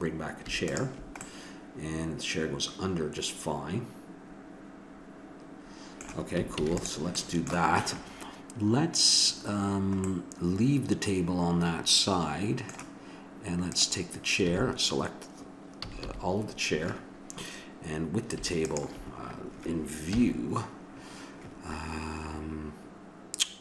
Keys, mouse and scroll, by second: 0.7 click, 1.2-2.7 middle drag, 6.6 ctrl+s, 13.7-15.7 drag, 14.5 a, 15.8 a, 16.0 a, 18.6-20.4 drag, 20.1 KP_7.